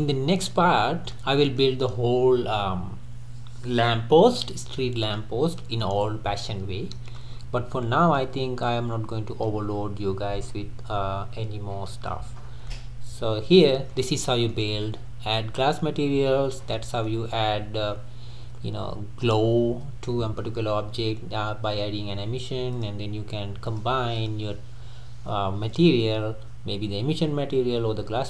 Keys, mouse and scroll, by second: 6.6-7.0 scroll down 2, 7.0-7.3 middle drag, 7.3-8.2 scroll up 7, 8.2-12.6 middle drag, 12.6 scroll down 1, 12.7-16.2 middle drag, 16.2-16.8 scroll down 2, 16.8-22.9 middle drag, 22.9 click, 24.2 drag.